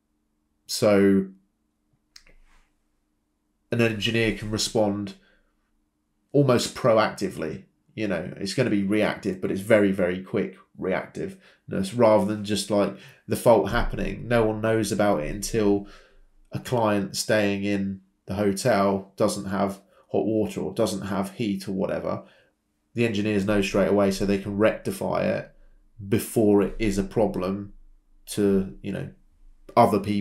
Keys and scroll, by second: 0.7 Escape, 3.0 Escape, 16.1-18.7 typing, 23.9-24.7 typing.